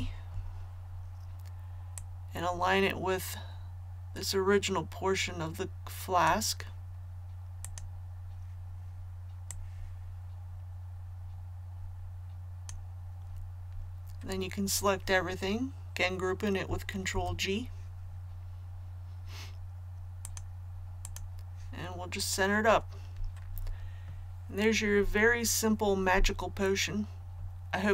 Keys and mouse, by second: 1.9-13.3 drag, 17.1 ctrl+g, 20.2 click.